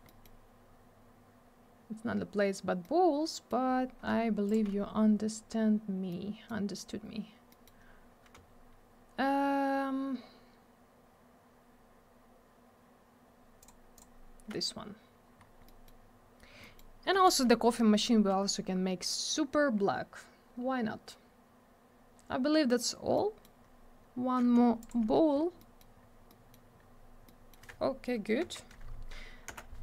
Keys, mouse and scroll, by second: 0.0 middle click, 1.5-1.9 scroll down 1, 2.8 middle click, 3.7 scroll up 1, 4.5 ctrl+click, 4.5 ctrl+click, 6.1 middle click, 7.5 middle click, 7.6 middle click, 7.8 scroll up 1, 13.6 ctrl+click, 13.9 ctrl+click, 15.4 scroll down 1, 15.7 middle click, 16.3 scroll down 1, 16.6 middle click, 16.8 middle click, 17.2 ctrl+click, 23.1 middle click, 23.4 scroll down 1, 23.6 scroll up 1, 24.8 ctrl+click, 25.4-25.7 scroll down 1, 25.7 middle click, 25.9 scroll down 1, 26.3 middle click, 26.7 scroll down 1, 27.2 middle click, 29.5 m.